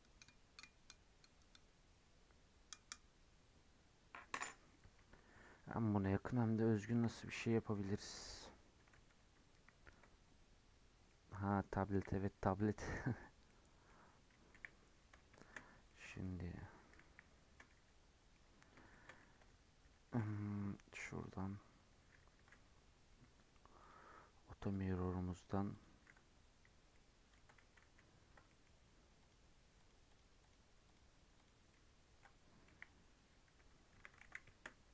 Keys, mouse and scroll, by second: 11.1 middle click, 11.9 KP_1, 12.2 scroll up 3, 12.4 middle click, 12.8 scroll down 4, 12.9 middle click, 13.2 scroll up 3, 13.4-14.5 middle drag, 14.5 KP_1, 14.7-15.0 scroll down 1, 15.0-15.4 scroll up 5, 15.4 shift+middle drag, 15.7 Tab, 15.9 middle click, 16.2 scroll down 1, 16.3 middle click, 17.0 KP_1, 17.4 scroll down 2, 17.6-19.4 middle drag, 19.4 n, 19.8 n, 21.2 click, 23.8-24.8 drag, 25.3 click, 25.7 click, 26.2 Tab, 26.6 Tab, 26.9 middle click, 27.6 ctrl+z, 27.8 ctrl+z, 28.4 middle click, 29.2 click, 30.1 click, 30.4-31.7 drag, 31.7 middle click, 32.6 KP_1, 33.9 1, 34.2 alt+z, 34.4 shift+middle click, 34.6-34.9 scroll up 1.